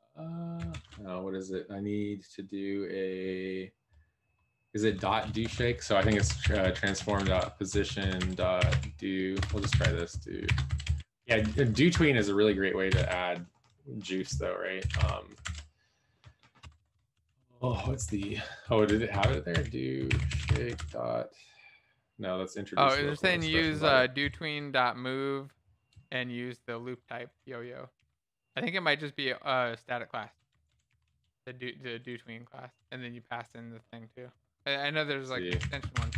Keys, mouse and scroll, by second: 7.0-8.2 typing, 29.8 b, 34.5 Return, 34.5 BackSpace, 34.9 Up.